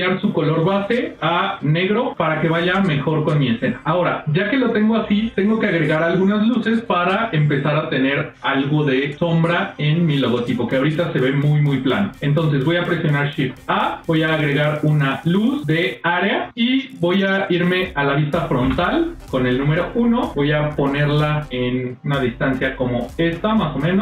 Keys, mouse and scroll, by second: 0.3 click, 2.0 middle click, 2.0-2.4 scroll down 3, 3.5 scroll up 1, 3.6 middle click, 3.7-4.4 scroll down 1, 10.3 middle click, 11.9 middle click, 13.4 shift+a, 18.5 KP_1, 19.9 shift+middle click, 20.2-21.0 shift+scroll down 1, 21.0 g, 23.6 shift+scroll down 1, 23.7 shift+middle click.